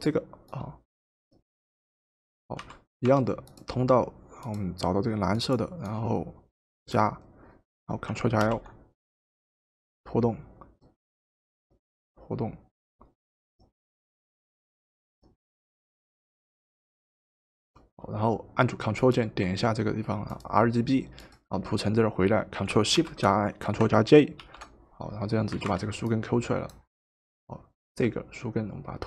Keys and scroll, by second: 2.7 w, 8.4 ctrl+l, 24.4 ctrl+shift+j, 25.6 v.